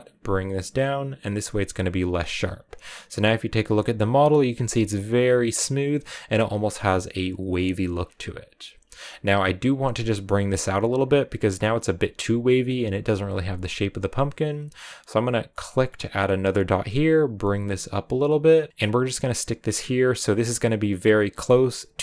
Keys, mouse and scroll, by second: 1.6 click, 2.4 scroll down 2, 18.7-21.1 middle drag, 21.1-22.0 drag.